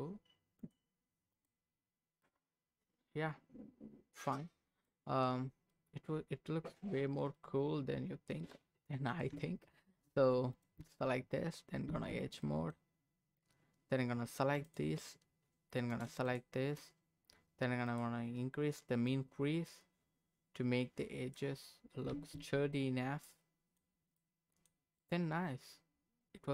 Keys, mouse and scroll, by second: 0.6 click, 1.3 click, 2.2-4.5 middle drag, 4.6 scroll up 2, 4.8 middle click, 5.5 scroll down 2, 5.7-7.0 middle drag, 7.1 scroll down 1, 7.3 middle click, 8.5 scroll up 1, 9.1 click, 9.3 Tab, 10.5 click, 10.8 Tab, 12.2 scroll up 1, 12.4 middle click, 13.0-13.6 scroll up 1, 14.6 alt+click, 16.3 alt+shift+click, 17.9 click, 19.1-21.3 drag, 22.1 Tab, 22.7-23.8 middle drag, 23.8-24.2 scroll down 2, 24.2 middle click, 25.0-26.5 middle drag.